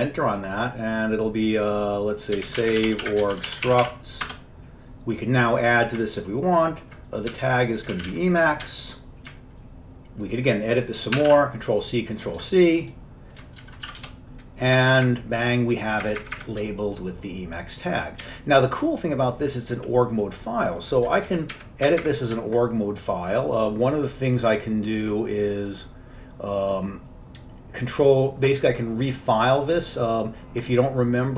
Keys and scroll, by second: 2.2-4.4 typing, 7.2-8.7 typing, 8.8 Return, 10.6-11.7 typing, 13.7 ctrl+x, 14.0 b, 14.1 Return, 14.8 Up, 15.0 Up, 15.2-16.1 Up, 16.3 Up, 16.5 Up, 18.3-21.3 Left, 18.7-19.6 typing, 21.4 alt+Down, 21.6 alt+Down, 22.0 alt+Up, 22.1 alt+Up.